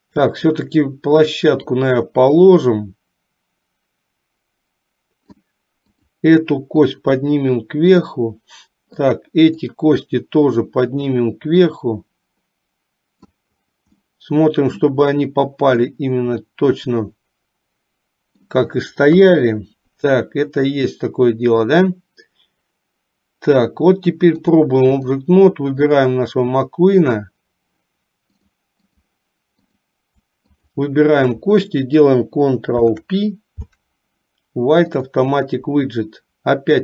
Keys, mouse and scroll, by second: 0.2 click, 1.8-5.5 drag, 6.0 click, 7.0-8.1 drag, 9.1 click, 10.6-13.4 drag, 14.2 middle click, 16.0-18.6 middle drag, 19.2 KP_3, 24.5 click, 26.0 click, 28.5 click, 29.9 click, 30.8 shift+click, 32.7 ctrl+p.